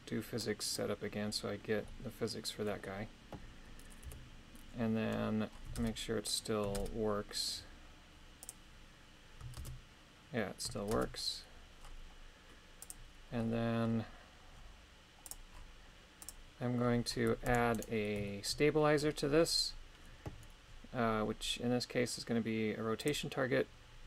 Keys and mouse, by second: 0.5 click, 1.8-2.8 middle drag, 4.0 KP_3, 5.8 shift+space, 6.7 shift+space, 8.4 click, 9.6 shift+space, 11.0 shift+space, 12.8 click, 15.2 click, 16.2 click, 17.5 ctrl+Tab, 17.7 right click, 18.3 shift+middle click, 23.1 click.